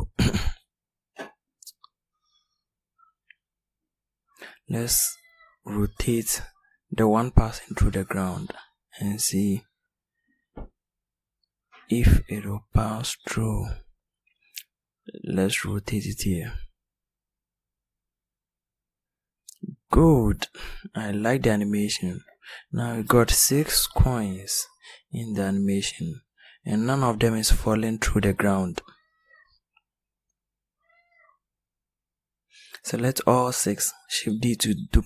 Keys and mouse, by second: 1.8 s, 4.2 r, 13.4 r, 23.0-24.9 drag, 24.9-25.5 middle drag, 29.4-32.6 right drag, 32.6 shift+d.